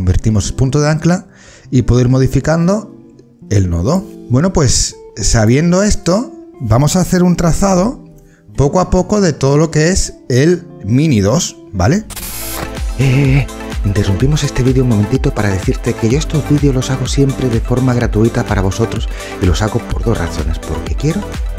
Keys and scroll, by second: 7.5 ctrl+d.